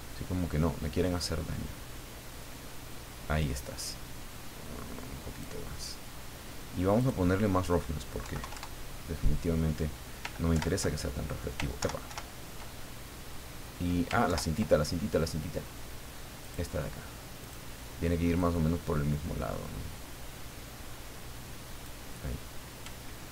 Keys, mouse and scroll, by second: 7.0 click, 8.2 KP_Decimal, 8.4 KP_2, 8.5 KP_Enter, 10.5 ctrl+Left, 11.8 ctrl+Right, 14.2 ctrl+Left, 16.4 click, 17.4 click, 18.4-22.0 drag.